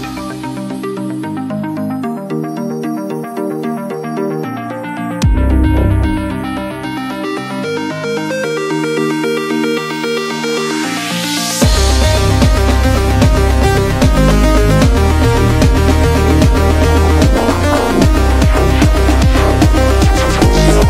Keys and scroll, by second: 5.3 super+z.